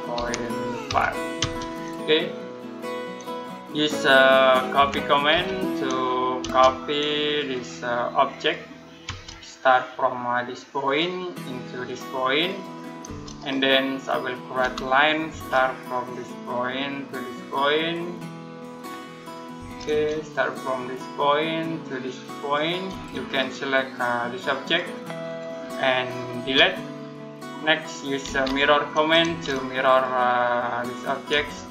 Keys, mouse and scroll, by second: 0.0-1.2 typing, 2.3 scroll down 1, 2.5 middle click, 4.6-5.1 typing, 6.3 space, 7.2 click, 8.9 space, 10.7 click, 12.9 space, 13.2-13.7 scroll up 1, 13.7 middle click, 14.4 l, 15.1 space, 16.5 click, 19.0 middle click, 19.4 space, 20.3 click, 22.7 space, 23.1 click, 26.3 Delete, 26.9-27.3 scroll down 1, 27.3 middle click, 27.8-29.1 typing, 29.7 click, 31.2 space.